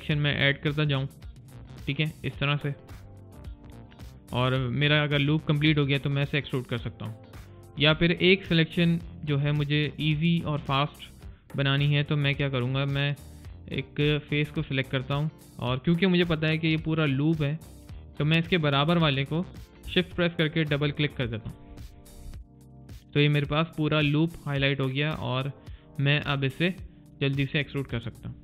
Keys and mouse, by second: 0.3 click, 0.7 click, 1.1 click, 1.4 click, 1.7 click, 9.0 click, 9.5 alt+click, 9.9 alt+middle click, 13.9 click, 19.7 shift+Num_Lock, 20.6 shift+click, 20.8 shift+click.